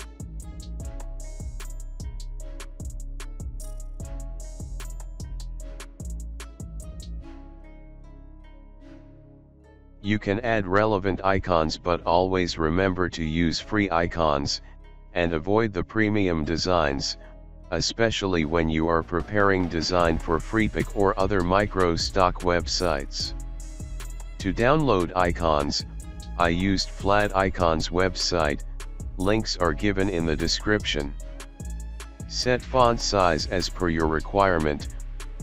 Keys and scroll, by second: 0.0 shift+Right, 0.1-2.5 typing, 5.6 alt+shift+space, 6.6 alt+space, 9.2 alt+shift+space, 9.7 ctrl+z, 10.1 ctrl+g, 10.8 ctrl+g, 12.0 ctrl+g, 17.1 alt+space, 17.2 alt+space, 17.6 Up, 17.7 Up, 18.4 Up, 19.0 Up, 19.0 Up, 19.1 Up, 19.1 Down, 19.2 Down, 19.4 space, 20.5 Up, 21.4 space, 22.7 alt+space, 23.5 ctrl+g, 23.8 ctrl+g, 24.1 ctrl+g, 24.5 ctrl+g, 25.1 alt+space, 26.3 alt+space, 27.7 ctrl+shift+g, 28.5 space, 29.8 Right, 30.0 Right, 30.3 space, 30.5 space, 31.0 Left, 31.1 Left, 32.3 space, 34.4 space.